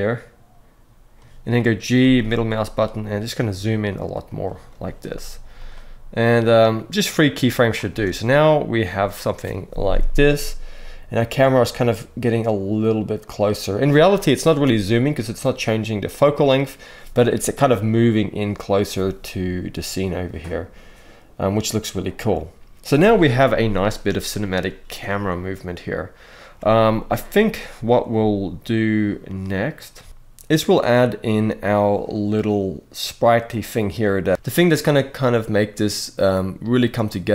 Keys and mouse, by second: 1.7 g, 1.9 middle click, 4.0 click, 5.4-7.5 drag, 7.6 space, 26.3 space, 29.8 ctrl+s.